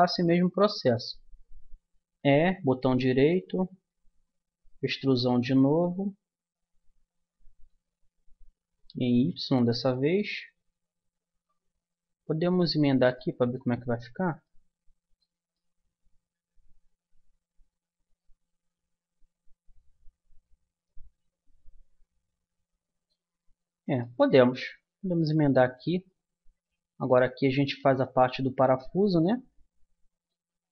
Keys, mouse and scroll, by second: 0.6 middle click, 0.8-2.2 middle drag, 2.2 e, 4.8 e, 7.7 e, 13.2 middle click, 23.4-26.2 middle drag, 24.8 Tab, 28.0 middle click.